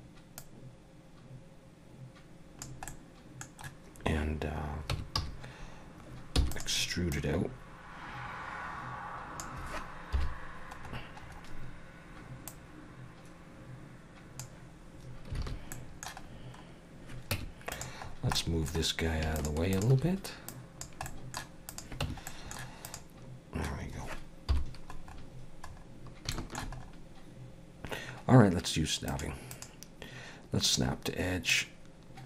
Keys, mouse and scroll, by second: 0.4 click, 2.9 middle click, 4.9 Tab, 5.2 a, 6.4 e, 7.1 click, 10.1 KP_7, 10.8-12.5 scroll up 5, 12.5 click, 15.4 alt+a, 15.7 middle click, 16.3 scroll down 3, 17.3 Tab, 17.7 click, 18.1 scroll down 3, 18.4 middle click, 19.4 shift+click, 19.7 click, 20.5 click, 21.1 middle click, 21.7 click, 22.0 Tab, 22.3 middle click, 22.9 click, 24.5 KP_7, 25.1 scroll up 2, 25.7 scroll up 4, 26.3 shift+middle click, 26.8 scroll up 1, 29.1 click, 29.9 click, 31.5 click.